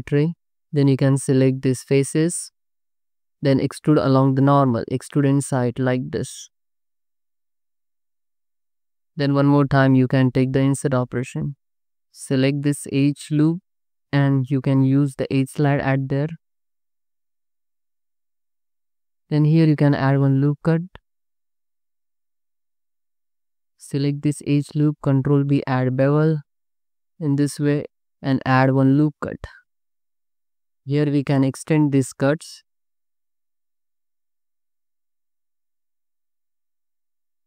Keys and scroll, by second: 3.2 3, 9.6 i, 12.0 2, 13.9 g, 16.8 g, 18.1 Tab, 19.0 Tab, 19.5 ctrl+r, 20.7 Tab, 21.5 Tab, 22.6 ctrl+r, 25.5 ctrl+b, 28.9 ctrl+r, 29.5 Tab, 30.3 alt+shift+z, 31.4 space, 32.8 space, 34.2 space, 35.8 space, 37.1 space.